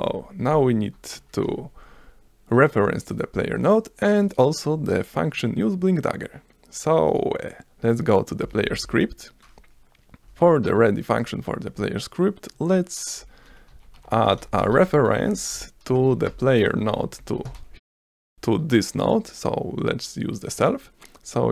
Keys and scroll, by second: 0.1 Down, 8.4-9.5 typing, 10.3 Return, 13.5-18.1 typing, 15.3 Return.